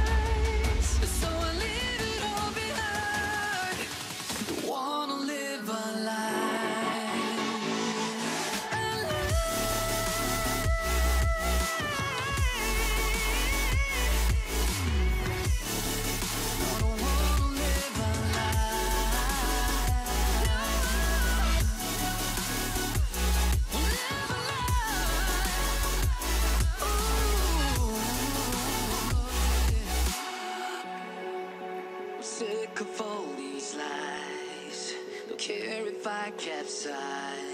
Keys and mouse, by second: 2.0-2.8 drag, 6.3 click, 7.3 click, 8.8 drag, 9.1 click, 9.6-10.0 middle drag, 11.8 KP_5, 13.1 click, 13.5 click, 15.0 click, 15.6 middle click, 16.5 click, 16.8 middle click, 17.8 middle click, 18.0 middle click, 18.9 g, 20.7 click, 20.8 middle click, 22.1 click, 23.1 middle click, 24.2 click, 25.7 click, 26.1 middle click, 27.4 click, 27.6 middle click, 29.0-30.4 middle drag, 30.9 middle click, 31.7 click, 32.2 g, 32.9 click, 33.1 middle click, 34.6 click, 35.1 drag, 35.5 click, 36.0 click, 36.9-37.5 drag.